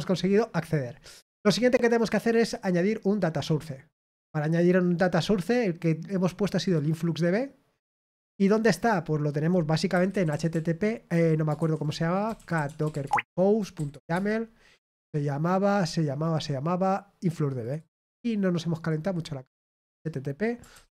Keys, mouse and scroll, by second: 3.3 click, 6.6 click, 8.7 click, 11.9-13.3 typing, 17.6 click, 18.7 click.